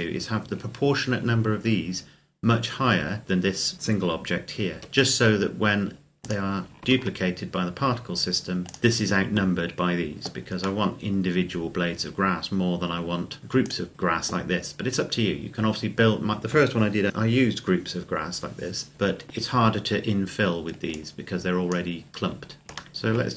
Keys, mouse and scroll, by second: 4.5 shift+d, 6.0 click, 6.6 shift+d, 8.5 click, 10.7 middle click, 13.4 right click, 13.9-14.8 scroll up 1, 19.8 scroll down 1, 20.7 click, 22.0-22.4 scroll up 1, 22.8 shift+middle click, 22.9 shift+right click.